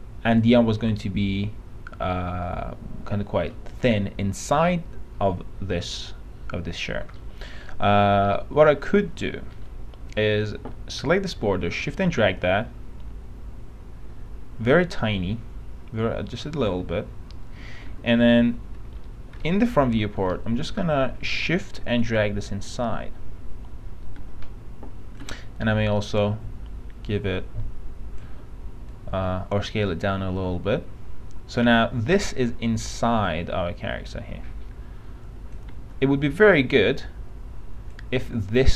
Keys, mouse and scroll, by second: 0.5 click, 3.7 middle click, 8.3-8.8 scroll up 1, 8.8 alt+middle click, 12.1-16.8 shift+drag, 18.1 f, 19.2 F3, 19.6 middle click, 19.8-20.1 scroll up 1, 20.5 middle click, 21.9-23.5 shift+drag, 25.8 shift+r, 26.3-28.4 drag, 28.4 w, 29.1-35.8 drag, 35.8 e, 36.6 click.